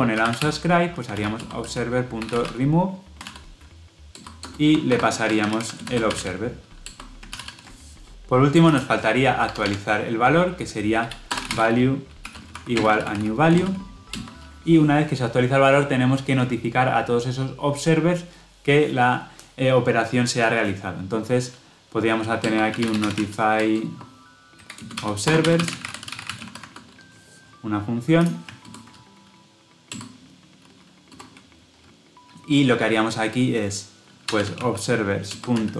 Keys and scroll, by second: 1.2 Tab, 1.7 Return, 5.2 Delete, 6.7 Delete, 7.2 Return, 7.3 ctrl+alt+l, 9.4 Tab, 14.0 Return, 28.5 alt+Return, 35.2 Return.